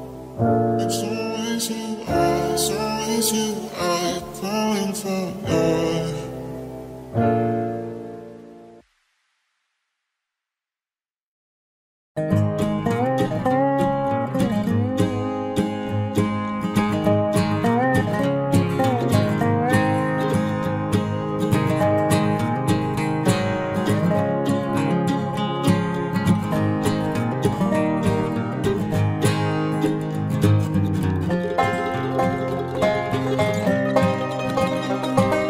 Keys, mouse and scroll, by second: 0.7 click, 1.1 right click, 1.4 click, 1.7 c, 2.4 middle click, 3.5-5.8 typing, 7.1 i, 8.8-9.9 drag, 9.9 KP_3, 10.0 click, 10.1 KP_Decimal, 10.5 z, 11.2 c, 12.5 click, 13.1 c, 20.4-22.4 right drag, 21.0 c, 22.7-24.6 right drag, 23.7 e, 24.6 z, 24.7-27.4 drag, 27.4 KP_3, 27.7 KP_Decimal, 29.1 ctrl+b, 32.2 ctrl+s, 32.6 Tab, 33.0 z.